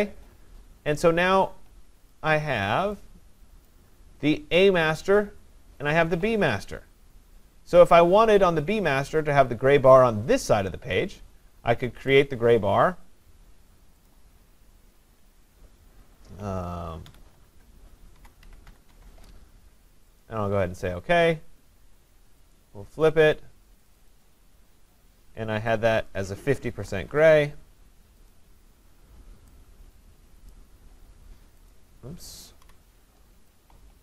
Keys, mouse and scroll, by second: 2.1 click, 3.7 click, 12.2 click, 14.2 click, 17.1-19.2 typing, 17.5 Tab, 20.2 click, 22.6 click, 23.9 click, 24.1 click, 26.1 click, 26.7-27.3 typing, 28.3 click, 30.5 click, 32.6 Delete.